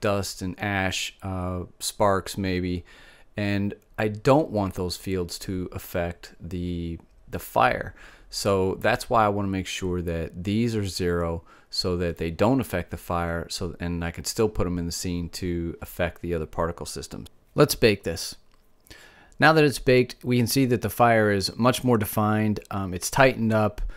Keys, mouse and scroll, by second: 21.0-22.4 middle drag, 23.2 middle click, 23.8 middle click.